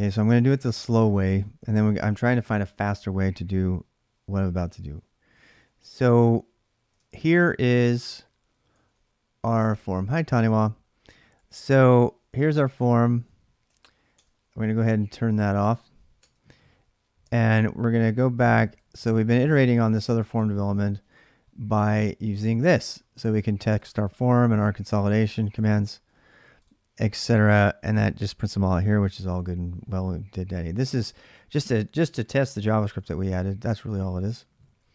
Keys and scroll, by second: 0.0-2.0 typing, 5.3 ctrl+a, 5.3 e, 5.4 ctrl+a, 6.8 ctrl+[, 7.0-11.6 typing, 12.8-15.4 typing, 16.0 Tab, 17.2 ctrl+a, 17.4 ctrl+a, 18.4 ctrl+[, 18.5 k, 19.7 BackSpace, 20.1 alt+Tab, 24.0-27.4 typing, 32.7 alt+Tab.